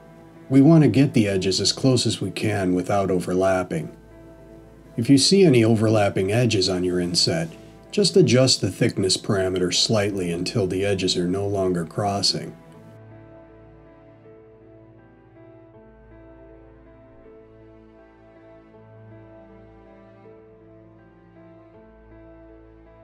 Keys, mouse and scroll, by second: 4.3 middle click, 7.0-7.8 scroll up 3, 7.9 middle click, 9.4-9.8 scroll up 2, 12.3-13.1 scroll down 2, 13.1 middle click, 16.7-17.1 scroll up 2, 17.4-18.8 scroll up 1, 20.7 click, 21.1 click, 21.3 click.